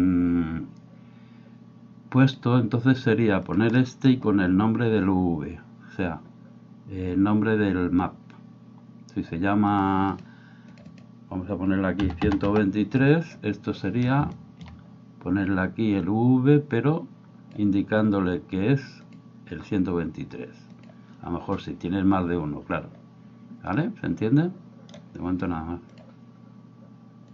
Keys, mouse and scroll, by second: 3.8 middle click, 9.7 click, 10.7-13.4 drag, 16.2-17.5 drag, 19.0-20.9 drag, 23.8-25.0 middle drag.